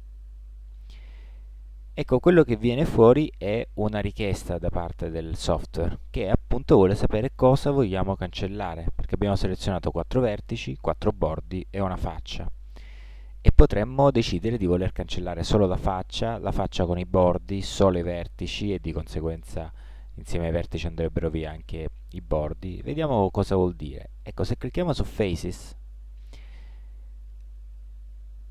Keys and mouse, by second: 28.1 middle click.